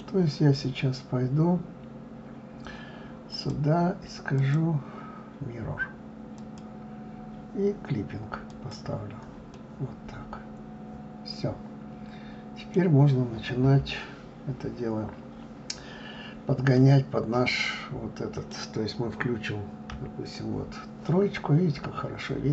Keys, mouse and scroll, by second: 3.4 click, 4.5-7.5 drag, 8.6 click, 9.6-12.6 middle drag, 16.8-19.9 middle drag, 20.0 KP_3, 21.6-22.5 scroll up 1.